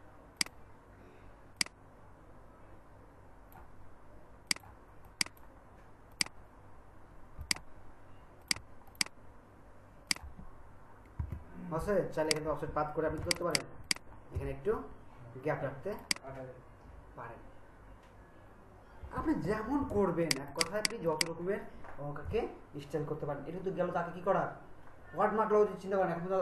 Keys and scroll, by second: 11.2 BackSpace, 13.2 ctrl+alt+space, 19.9 ctrl+alt+space.